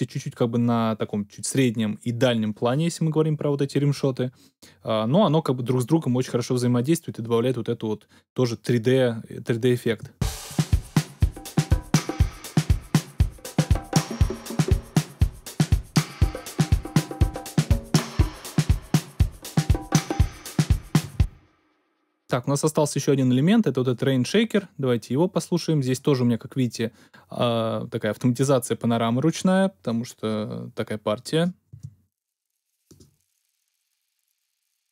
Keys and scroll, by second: 9.9 space, 21.0 space, 31.7 space.